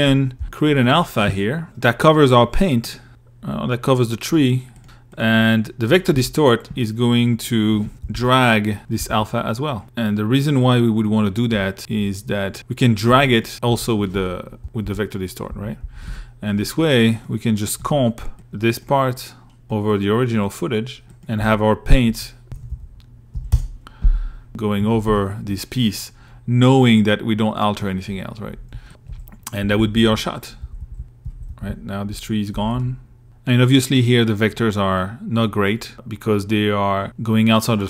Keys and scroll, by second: 3.2-5.3 typing, 7.3 shift+Right, 8.2 shift+Right, 12.3 i, 12.9 a, 13.8 shift+Right, 14.7 shift+Left, 17.0 l, 17.5 m, 20.2-22.1 typing, 22.7 Return, 24.5 i, 25.2 2, 25.7 1, 26.0 2, 28.2 alt+Right.